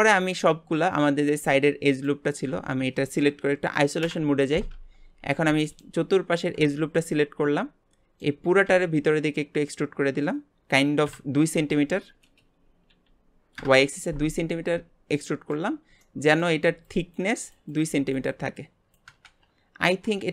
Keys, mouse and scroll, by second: 1.2 click, 2.5 Tab, 4.0 KP_Divide, 4.7 Tab, 5.7 alt+shift+click, 6.7-8.7 middle drag, 8.7 e, 14.6 scroll up 1, 15.1 middle click, 15.7 scroll up 1, 16.0-19.3 middle drag.